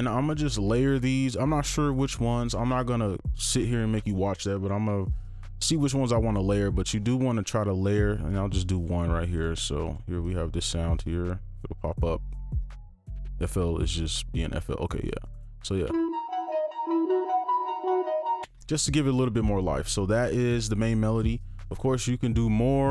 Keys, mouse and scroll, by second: 8.2 right click, 10.2 double click, 15.8 space, 18.4 space.